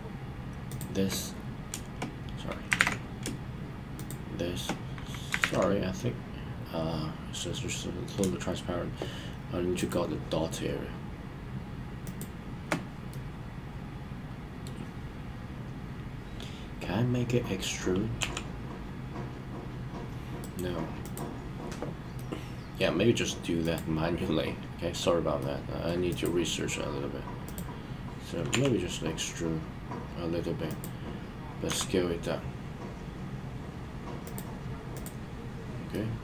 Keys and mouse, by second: 0.6 shift+click, 2.8 super+z, 5.4 super+z, 5.9-8.1 middle drag, 9.7 shift+click, 12.0 shift+click, 13.1-14.7 middle drag, 18.2 e, 20.4 right click, 22.1-22.8 middle drag, 23.6 click, 25.4 middle click, 26.0 click, 27.4 click, 28.5 e, 31.6 s, 34.2 click, 35.9-36.2 middle drag.